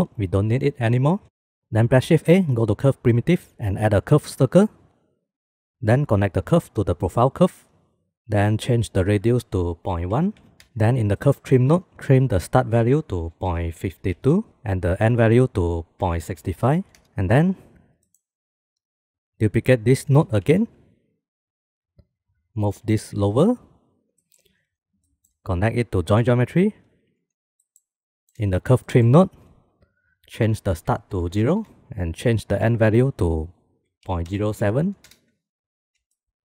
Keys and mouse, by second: 0.6 shift+click, 1.0 x, 1.6 shift+a, 2.2 shift+a, 6.8-8.1 drag, 9.3 click, 10.7 middle click, 13.0-14.5 drag, 14.9-17.0 drag, 18.6 click, 19.9 click, 20.9 shift+d, 22.8 click, 23.7 g, 24.7 click, 25.6 middle click, 26.0 middle click, 26.6-27.3 drag, 28.2 click, 29.4 click, 29.5 middle click, 30.9-32.7 drag, 33.6-36.0 drag.